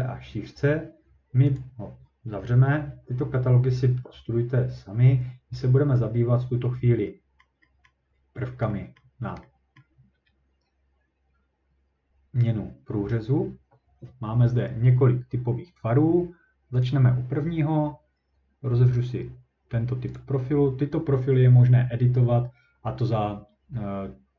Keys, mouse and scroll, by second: 1.6 click, 7.4 middle click, 7.9 middle click, 8.2-8.7 scroll up 4, 8.9 scroll down 2, 9.0 middle click, 9.2 scroll up 1, 9.4 scroll down 3, 9.8 middle click, 9.8-10.1 scroll up 3, 11.6 scroll down 6, 12.2 scroll, 16.8 click, 20.2 click.